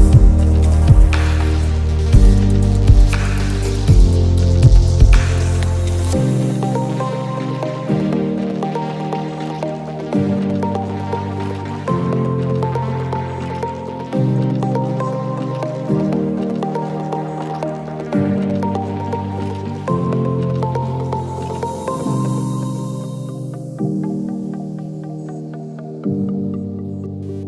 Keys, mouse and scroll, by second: 1.5 click, 2.5 ctrl+z, 3.3 ctrl+z, 3.3 ctrl+y, 3.7 click, 4.4 right click, 4.6 click, 5.1 ctrl+shift+g, 5.2 click, 8.6 space, 9.2 click, 9.6 shift+click, 11.3 i, 11.7 click, 12.7 shift+click, 12.9 i, 13.1 click, 14.6 alt+scroll down 1, 14.8 space, 15.4 alt+scroll up 1, 15.9 click, 16.8 ctrl+shift+g, 17.0 click, 17.2 ctrl+shift+g, 17.4 click, 17.6 ctrl+shift+g, 17.8 click, 18.1 ctrl+shift+g, 18.2 click, 18.6 alt+scroll down 1, 19.0 click, 20.6 click, 21.5 shift+click, 23.4 i, 23.6 click, 24.6 shift+click, 26.0 i, 26.6 click.